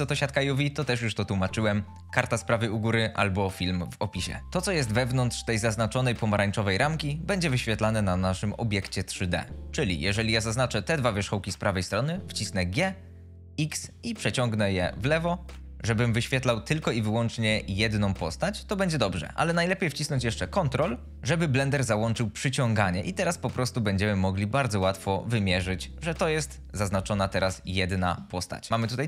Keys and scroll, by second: 12.9 g, 13.5 x.